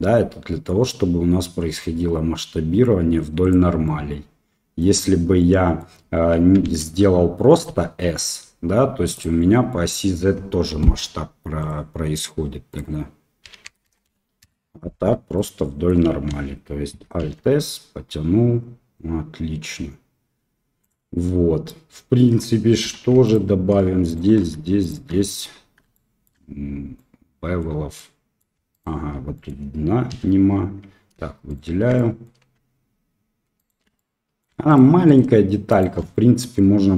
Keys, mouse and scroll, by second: 3.8 middle click, 5.3 middle click, 6.6 ctrl+z, 7.6 s, 9.3 middle click, 12.8-14.9 drag, 13.8 KP_0, 15.3 middle click, 16.2 ctrl+z, 17.2 alt+s, 21.2 middle click, 22.8 2, 23.2 alt+click, 24.0 alt+shift+click, 24.8 click, 25.9 shift+middle click, 26.9 middle click, 27.9 middle click, 28.7 alt+click, 29.4 middle click, 30.0 f, 31.4 alt+shift+click, 31.9 middle click, 33.5 alt+shift+click, 33.9 middle click, 34.6 alt+shift+click, 35.0 alt+shift+click, 36.1 middle click.